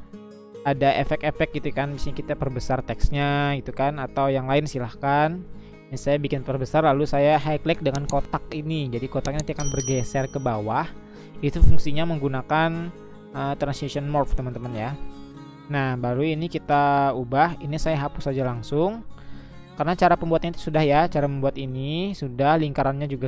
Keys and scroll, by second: 0.6 Up, 0.7 Up, 1.5 Up, 1.5-2.3 Left, 3.3 Left, 5.3 Left, 5.7 Left, 7.7-8.7 Down, 9.4 Down, 9.7 Down, 10.0 Down.